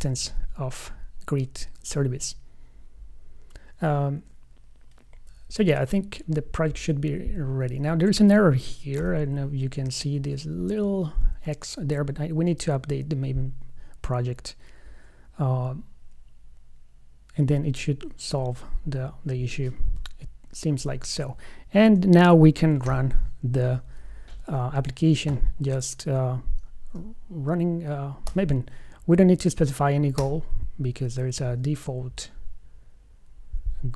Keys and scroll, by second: 9.3 alt+F5, 23.3 super+F11.